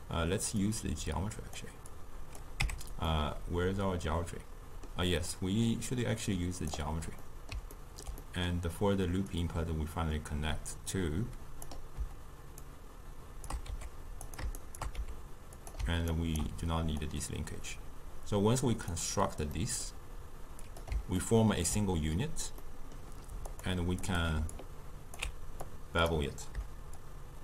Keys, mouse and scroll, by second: 2.6 Tab, 3.1-5.8 middle drag, 5.8-7.3 drag, 7.3-9.4 middle drag, 9.4 click, 12.6 shift+right click, 13.7 g, 14.6 shift+right click, 15.0 g, 16.1 ctrl+right click, 17.1 click, 19.6-20.6 middle drag, 20.6 click, 21.2-23.3 ctrl+middle drag, 23.3 scroll down 1, 23.5 click, 24.1 click, 24.6-27.4 alt+drag.